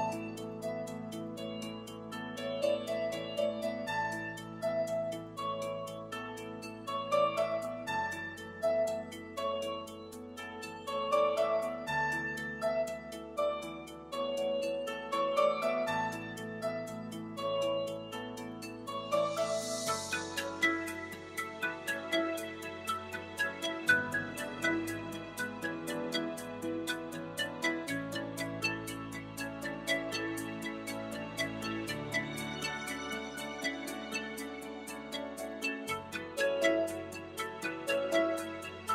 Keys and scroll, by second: 0.3 c, 6.7 super+s, 12.7 3, 14.8 i, 16.9 l, 29.0 i.